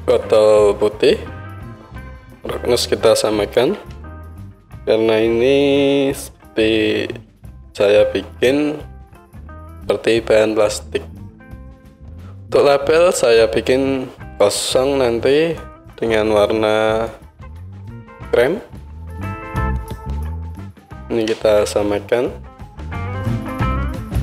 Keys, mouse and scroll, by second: 0.0-7.6 drag, 0.0-7.6 middle drag, 0.0-9.3 right drag, 9.3-15.8 middle drag, 15.8-20.5 right drag, 20.5-23.1 middle drag, 23.1-24.2 right drag.